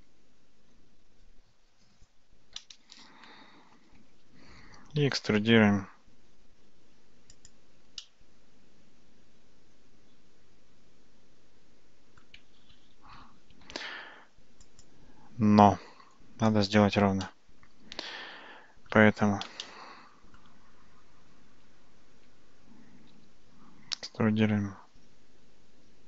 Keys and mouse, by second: 4.0 Tab, 5.0 e, 8.1-12.3 middle drag, 12.6 ctrl+z, 17.3-19.0 shift+middle drag, 19.7 shift+middle click, 21.7 Tab, 22.2 Tab, 23.2 e.